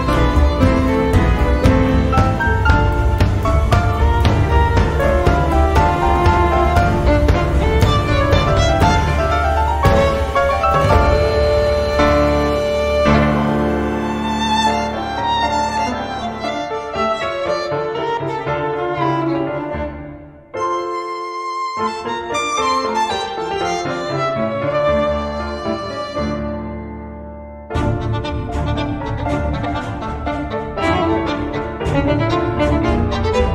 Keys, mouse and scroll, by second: 0.9 click, 2.3 click, 3.6 0, 5.4 click, 7.0 -, 7.9 x, 8.7 0, 10.6 click, 11.6-13.2 typing, 14.2 click, 15.0 click, 17.1-19.6 drag, 20.0 click, 21.1 click, 21.9 right click, 23.2 click, 24.7 click, 27.0 BackSpace, 28.6 click, 29.8 right click, 31.1 click, 32.1-33.2 drag.